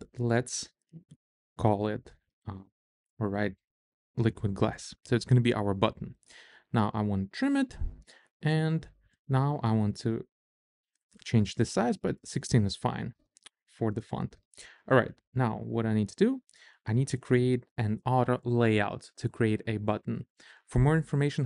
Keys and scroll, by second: 0.1 i, 1.2-4.4 typing.